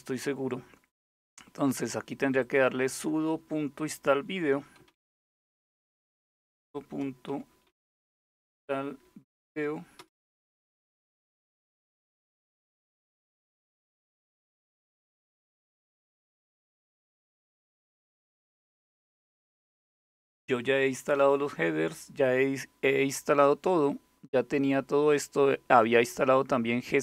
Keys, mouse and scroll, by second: 2.0 click, 4.4-8.9 typing, 9.1 Tab, 9.6 Return.